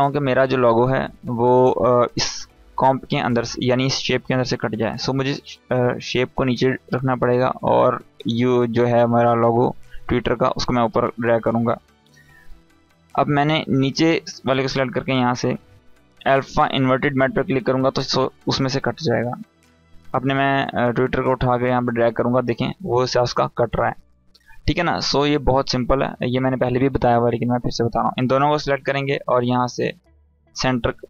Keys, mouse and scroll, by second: 1.6 click, 4.4 click, 13.3 click, 19.7-23.9 drag, 25.5 ctrl+z, 27.2-27.9 drag.